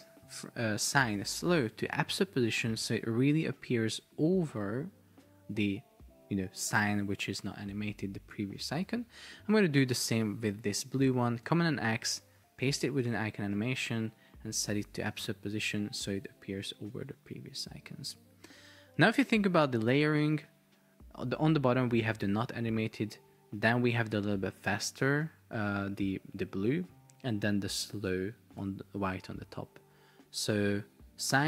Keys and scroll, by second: 11.5 super+x, 13.1 super+v, 19.1 super+Tab, 28.7 super+Tab.